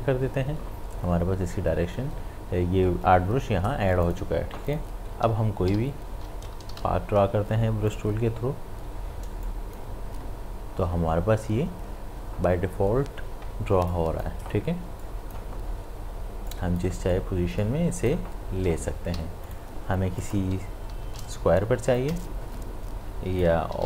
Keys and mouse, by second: 4.1 click, 5.7 p, 7.9 click, 13.9-19.1 drag, 19.1 v, 19.4 click, 20.9 l, 22.0-23.7 drag, 23.7 v.